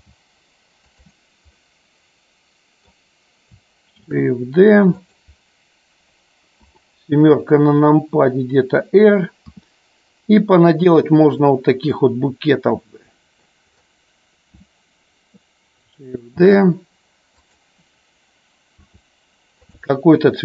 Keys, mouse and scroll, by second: 0.0 g, 1.5-3.0 middle drag, 4.1 shift+d, 5.1 click, 6.5 KP_7, 11.4 click, 12.0-13.6 middle drag, 16.5 shift+d, 17.4 click, 18.8 r.